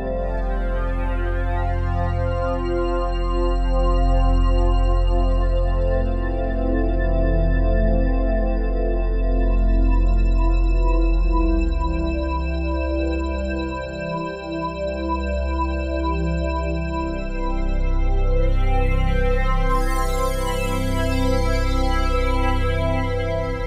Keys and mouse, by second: 1.2 Right, 1.4 Right, 1.5 Right, 1.7 Right, 2.9 Right, 2.9-6.0 drag, 6.5-13.8 i, 7.3 click, 9.4 Right, 9.7 Right, 9.8 Right, 10.0 Right, 12.0 click, 13.5 click, 17.0 click, 17.0-17.8 typing, 18.3 click, 19.6 click, 21.0-21.4 typing, 21.7 Return, 23.4 i.